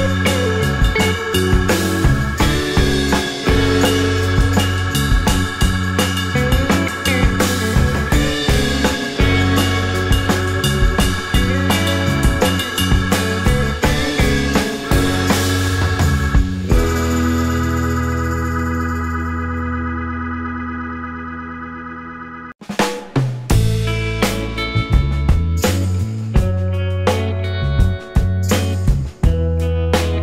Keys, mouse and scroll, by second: 0.0-1.5 typing, 2.1 Return, 3.0 scroll down 1, 3.3 alt+click, 3.7-4.1 alt+scroll up 2, 5.3 shift+click, 10.3 alt+click, 10.8 alt+middle click, 11.5 alt+click, 12.6 alt+click, 13.0 alt+middle click, 13.2-13.8 alt+scroll up 2, 14.0 scroll down 1, 14.5 alt+click, 15.8 double click, 16.6-17.1 scroll up 5, 16.8 alt+middle click, 18.4 alt+click, 19.5 shift+scroll down 2, 19.8 alt+click, 21.1 shift+click, 21.9 alt+middle click, 22.9-23.2 scroll up 4, 24.3 shift+click, 24.3 scroll down 2, 24.5 alt+click, 25.2 alt+middle click, 25.5 alt+click, 26.1 right click, 28.9-29.4 scroll down 1, 29.6 ctrl+z.